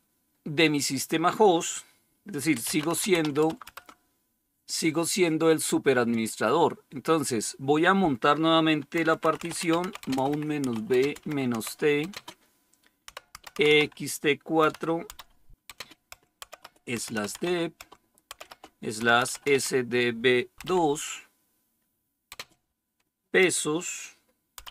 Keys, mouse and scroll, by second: 2.2-3.8 typing, 8.6-19.4 typing, 22.2 typing.